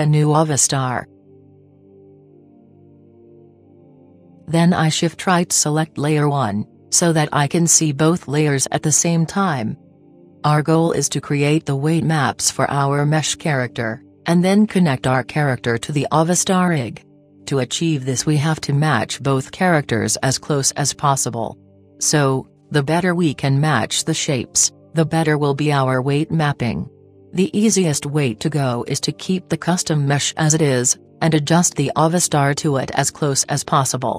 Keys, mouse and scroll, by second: 6.5-8.4 drag, 9.9-12.1 middle drag, 16.8-18.9 middle drag, 30.3 KP_1.